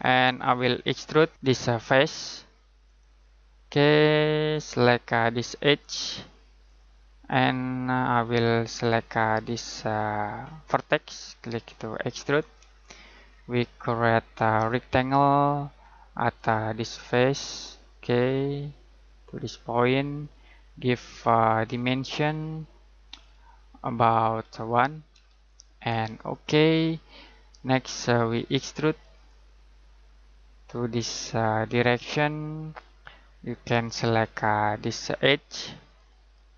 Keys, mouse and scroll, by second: 1.3-2.0 scroll down 1, 2.8 click, 10.6 click, 13.2-14.5 scroll down 1, 14.5 click, 25.1 1, 26.1 click, 31.8 click.